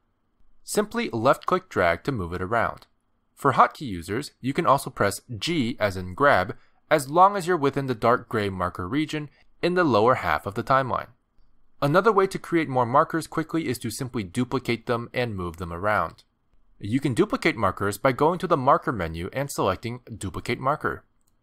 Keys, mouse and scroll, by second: 1.7 click, 6.1 g, 9.5 g, 10.6 g, 19.2 click.